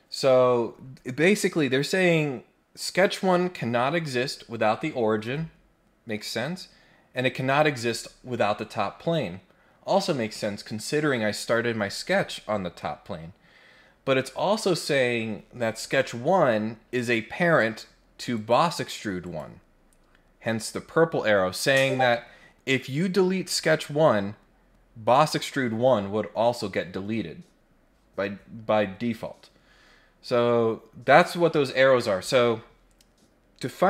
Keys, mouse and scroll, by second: 18.3 click, 19.2 click.